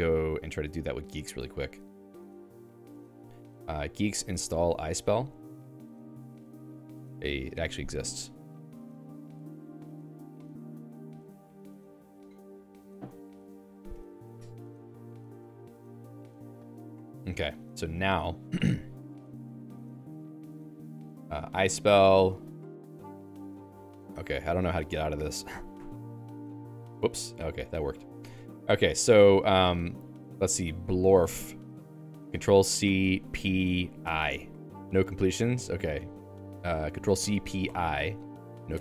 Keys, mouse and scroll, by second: 19.5 click, 20.3 Escape, 20.6-22.6 typing, 20.9 Return, 21.3 alt+x, 25.8 q, 26.6 ctrl+g, 27.5 j, 28.1 BackSpace, 28.2 Escape, 29.2-31.8 typing, 35.1 BackSpace, 35.3 BackSpace, 38.7 Escape.